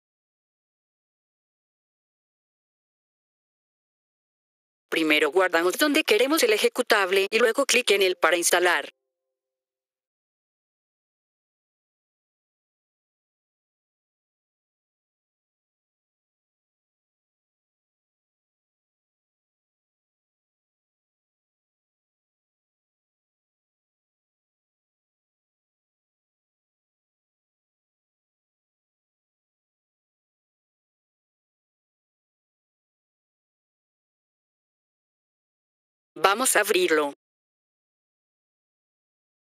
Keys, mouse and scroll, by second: 4.2 F4, 4.2 click, 4.8 click, 7.4 click, 10.8 click, 16.3 click, 18.1 F4, 19.5 click, 24.6-27.1 typing, 31.1 click, 33.5 F4, 36.0 click, 37.5 F4.